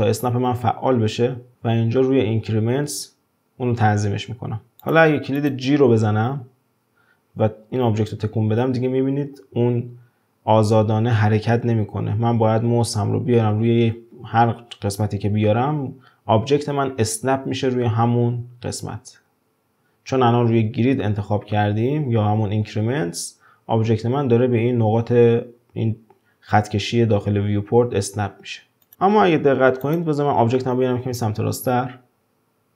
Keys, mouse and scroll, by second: 0.3 shift+Tab, 1.5-3.9 drag, 4.8 drag, 5.4 click, 6.2 g, 28.9 click, 29.8 click, 30.2-30.9 scroll down 1, 30.9-31.6 scroll up 1, 31.6 g.